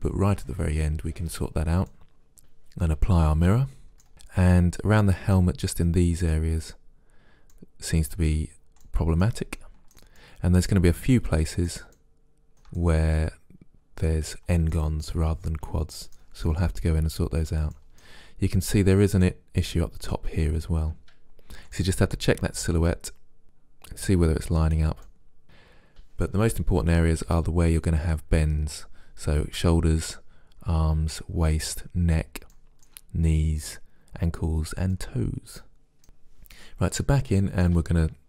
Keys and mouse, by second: 2.0 middle click, 4.1-5.7 middle drag, 6.4-7.8 middle drag, 9.0-13.4 middle drag, 18.0-20.9 middle drag, 21.8-23.4 middle drag, 25.1-26.4 middle drag, 32.6-34.5 middle drag, 35.0-36.0 middle drag, 36.0 Tab, 37.4-38.2 middle drag.